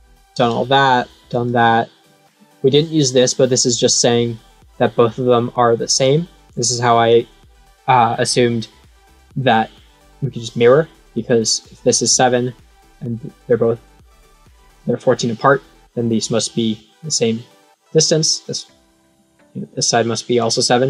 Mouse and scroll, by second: 0.2 click, 1.3 click, 19.3-20.3 drag.